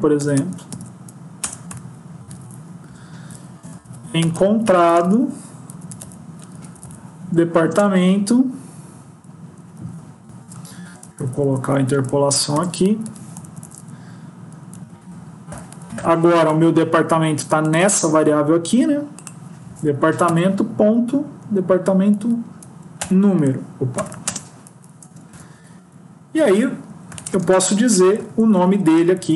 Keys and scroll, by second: 1.4 Return, 10.8 ctrl+Left, 11.6 Right, 12.9 End, 13.3 Left, 13.5 Left, 20.1 Right, 21.6 Up, 22.0 Down, 23.8 BackSpace, 24.1 ctrl+space, 25.6 Right, 29.0 Left.